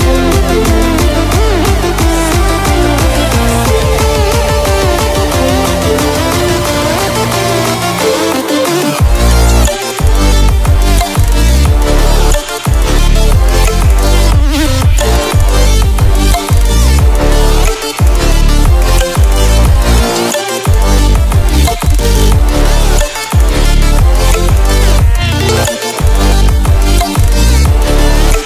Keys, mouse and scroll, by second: 0.8-6.7 drag, 14.0 click, 16.0 ctrl+w, 20.5 ctrl+w, 22.0 click, 24.5-26.1 scroll down 2, 27.1-27.8 typing, 27.4 ctrl+alt+scroll down 1.